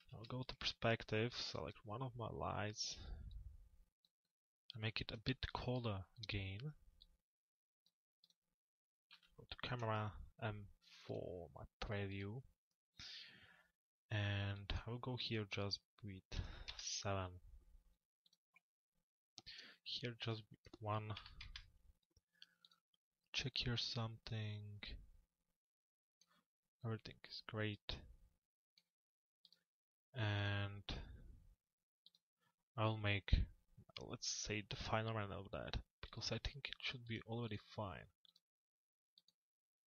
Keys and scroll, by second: 8.9 c, 9.7 m, 16.2 Return, 20.8 Delete, 21.4 Return.